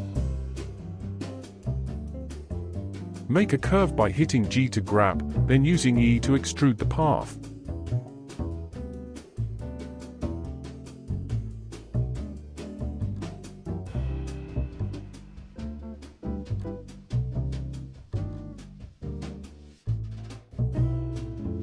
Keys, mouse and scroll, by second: 0.0 KP_3, 1.8-3.3 shift+middle drag, 3.3-3.7 scroll down 3, 3.7-4.9 shift+middle drag, 4.9 g, 9.1 e, 12.0 e, 15.0-16.3 drag, 16.3 g, 19.8 g.